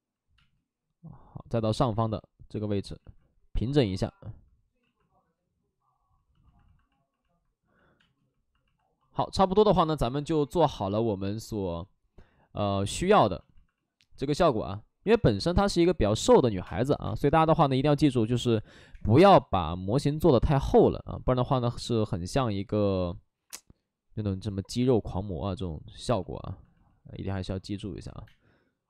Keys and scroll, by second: 0.3 space, 2.9 ctrl+z, 3.8 ctrl+z, 4.7 ctrl+z, 7.9 space, 16.5 3, 16.5 space, 17.0 space, 19.1 2, 20.1 ctrl+z, 28.2 space.